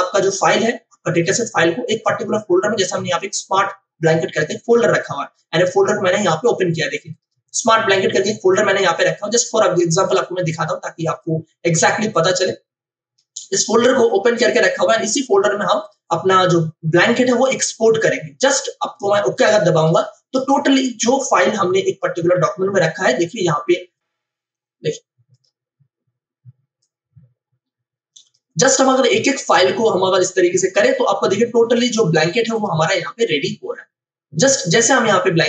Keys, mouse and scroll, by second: 1.1 click, 6.1 click, 7.3-15.8 drag, 19.3-23.9 drag, 25.3-28.8 drag, 34.7 click.